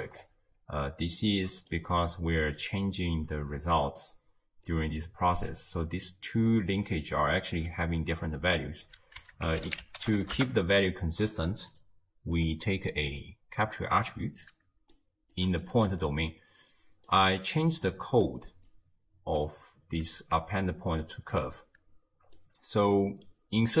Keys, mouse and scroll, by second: 0.2-1.2 scroll up 4, 1.2 click, 2.0-3.8 middle drag, 3.8-8.4 typing, 4.0 click, 6.3 click, 7.0 click, 8.6 right click, 9.4 ctrl+a, 12.4-14.1 drag, 15.4 click, 15.8 d, 16.0-17.1 drag, 17.1-17.9 d, 18.7 drag, 19.7 drag, 20.2 ctrl+x, 21.4 click, 22.9-23.8 middle drag.